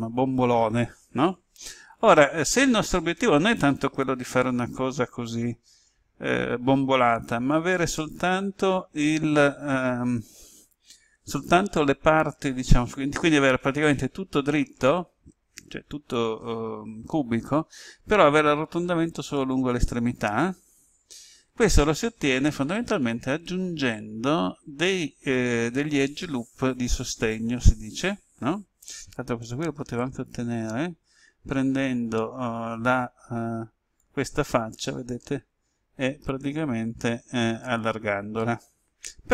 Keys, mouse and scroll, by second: 29.8 ctrl+z, 30.3 ctrl+z, 33.9-39.3 drag.